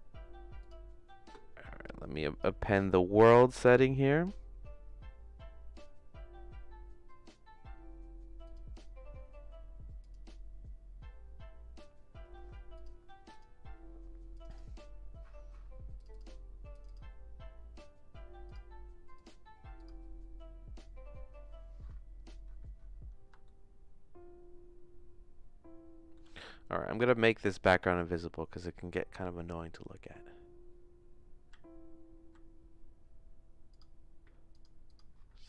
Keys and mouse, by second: 18.5 click, 19.2 click, 23.4-26.1 shift+middle drag, 27.4 click, 31.5 z, 34.5 click, 34.9 click.